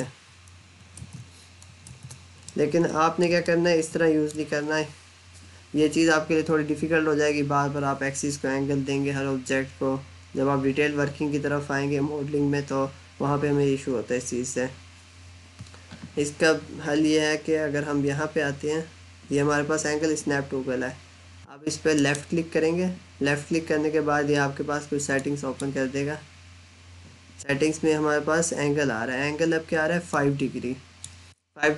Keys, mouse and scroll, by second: 0.5 ctrl+z, 2.3 middle click, 3.3 middle click, 21.8 right click, 24.9 click, 29.9 click.